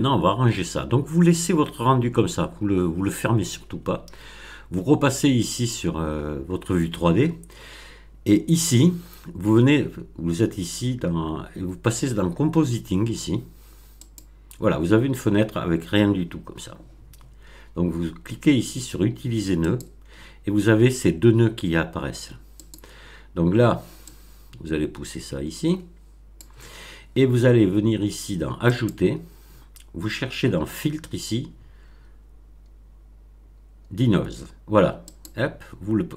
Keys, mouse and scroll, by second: 5.5 click, 14.0 click, 19.5 click, 22.5 click, 24.0-26.5 drag, 28.6 click, 35.0 click.